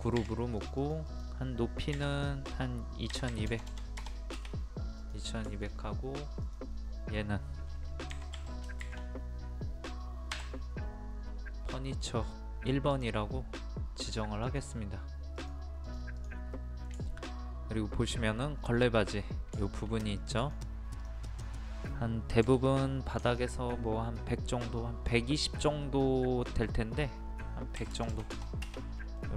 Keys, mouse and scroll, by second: 0.2 g, 0.6 click, 3.2 KP_2, 5.0 click, 5.5 shift+middle click, 6.5 click, 8.2 1, 10.4 KP_1, 12.4 middle click, 12.9 click, 16.6 middle click, 17.1 shift+middle click, 18.6-19.6 scroll up 1, 19.7 shift+middle click, 20.2 click, 22.5 m, 23.3 ctrl+click, 25.9 middle click, 27.8 KP_1, 29.2 middle click.